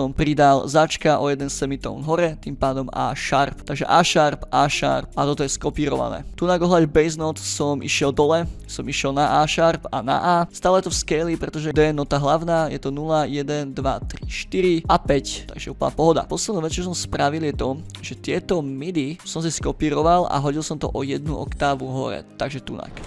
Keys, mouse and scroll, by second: 0.3 click, 0.9 click, 2.3-3.3 drag, 3.6 click, 4.0 click, 4.7 middle click, 5.0 click, 5.1 click, 5.6 click, 6.3 click, 6.5 click, 7.5-7.9 drag, 8.0 click, 8.6 click, 9.7 click, 10.4 click, 10.8 ctrl+scroll up 2, 11.5 ctrl+middle click, 11.7 click, 12.0 scroll down 2, 12.7 click, 15.7 scroll up 4, 16.2 scroll down 1, 17.2 scroll up 1, 18.1-19.2 drag, 19.8 scroll up 1, 20.4-22.4 drag, 22.7 ctrl+middle click.